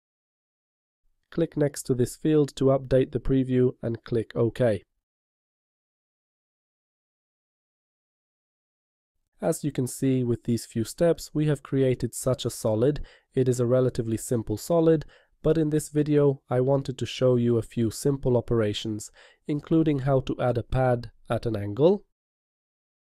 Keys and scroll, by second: 0.4 5.